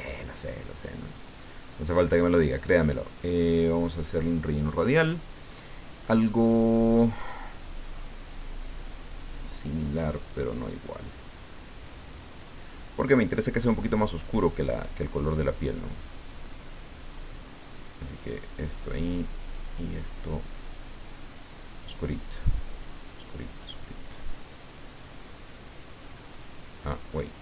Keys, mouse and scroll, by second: 4.2 click, 10.2 click, 12.1 click, 14.6-18.3 drag, 19.4 click, 21.5-27.4 drag.